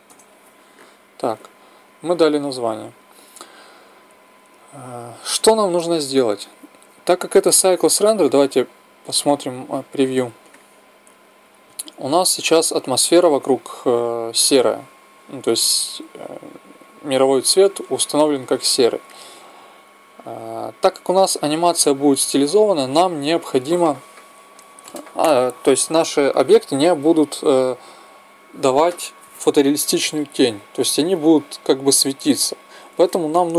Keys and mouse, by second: 8.2-10.2 drag, 10.0 middle click.